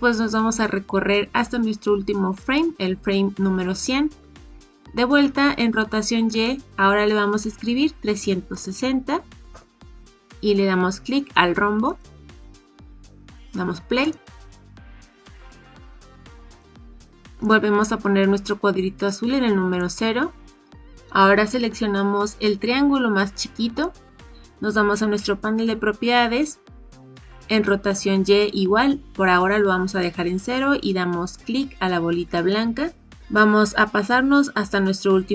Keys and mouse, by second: 2.3 click, 6.2-10.0 drag, 11.8 click, 14.1 click, 16.4 click, 17.4-19.7 drag, 32.3 click.